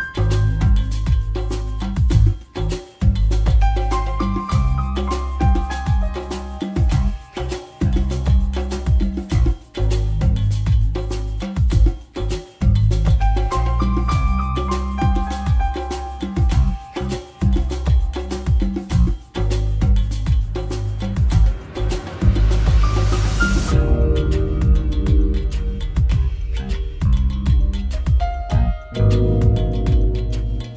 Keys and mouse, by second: 1.0 e, 16.1 a, 17.0 a, 18.0 KP_5.